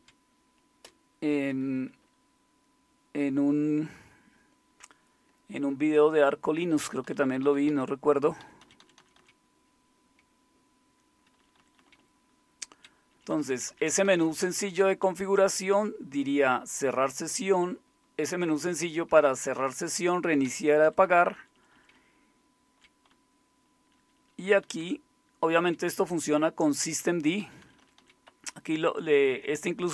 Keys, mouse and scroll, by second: 0.8 Return, 6.8 Down, 7.0 Down, 7.2 Down, 7.4 Down, 7.7-8.4 Down, 8.6 Down, 9.2 Down, 11.4-12.7 Down, 13.1 Down, 13.3 Down, 13.5 Down, 14.0 Down, 14.4 Down, 15.0 Down, 15.0-16.0 Up, 16.9 Up, 16.9-17.9 Right, 19.5 Right, 19.9 Down, 20.4 Down, 20.8 Down, 21.0 Down, 21.2 Down, 21.4 Down, 21.5-23.8 Down, 24.8 Down, 28.3-29.3 Up, 28.3 Down.